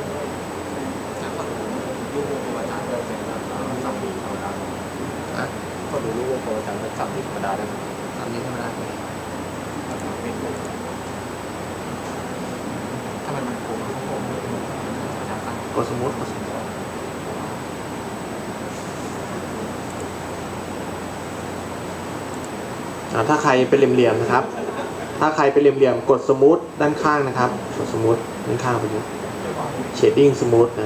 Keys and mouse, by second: 9.9-14.7 drag, 19.9-21.8 drag.